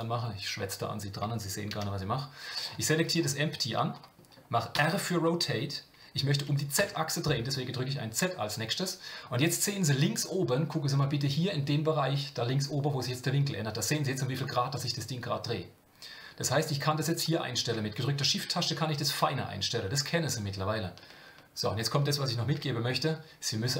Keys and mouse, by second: 2.5 drag, 3.1-18.1 drag.